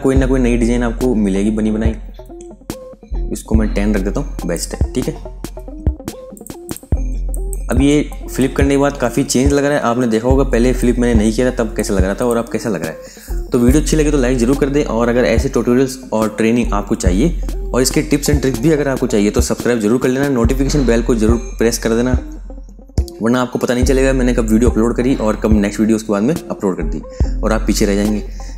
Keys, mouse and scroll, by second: 2.2-3.0 scroll up 1, 4.4 click, 7.0 space, 7.2 click, 7.6 space, 10.0 f, 10.4 space, 10.6 click, 11.0 space, 12.0 click.